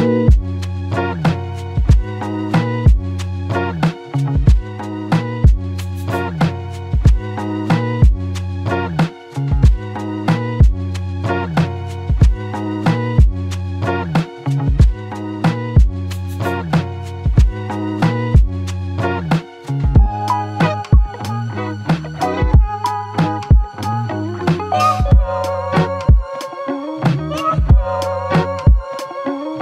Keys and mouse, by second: 0.0 alt+click, 4.6 double click, 14.8 ctrl+click, 16.6 ctrl+click, 19.5 ctrl+click, 22.1 w, 23.6 alt+click.